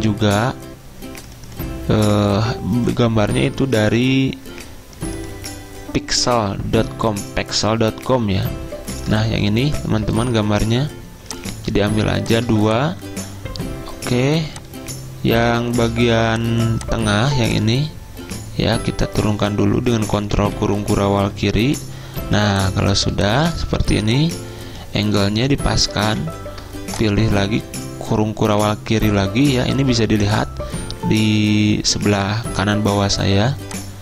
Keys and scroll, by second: 16.0 v, 20.2 ctrl+[, 20.4 ctrl+[, 20.6 ctrl+[, 22.2 z, 23.9 typing, 26.2 ctrl+[.